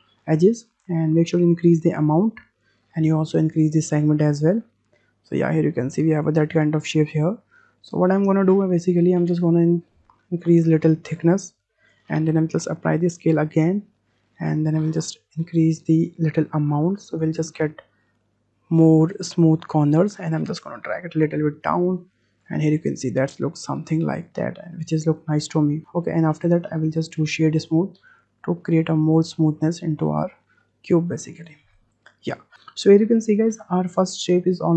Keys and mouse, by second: 1.5-2.6 drag, 3.7-6.3 drag, 6.5 drag, 6.7-7.2 middle drag, 7.8 middle drag, 9.2 click, 9.5 middle drag, 10.5-11.8 drag, 12.8 ctrl+a, 13.9 middle click, 16.3-18.8 drag, 19.5 w, 20.5-22.4 drag, 22.5-23.4 middle drag, 27.2-28.2 drag, 29.2-30.5 middle drag.